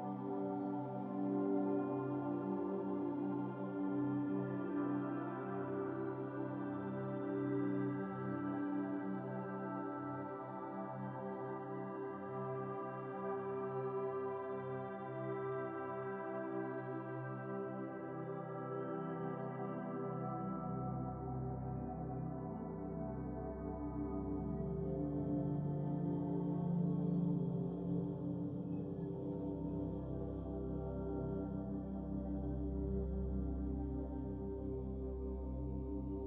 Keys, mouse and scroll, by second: 1.4 ctrl+z, 1.8 click, 2.2 click, 2.3-3.3 drag, 3.3 x, 4.2 drag, 4.6 click, 5.5-7.1 drag, 7.6-8.0 scroll down 16, 8.5 shift+a, 10.4-11.1 drag, 11.1-11.6 scroll up 9, 11.7 click, 12.2 x, 12.6-13.0 scroll up 1, 13.0 shift+a, 16.9-18.3 drag, 18.6-19.8 drag, 20.2 shift+a, 23.2-24.7 drag, 24.8 shift+a, 27.1 shift+a, 30.5-32.3 drag, 32.6-34.0 middle drag, 34.0-34.4 scroll up 4, 35.4-35.8 scroll up 8.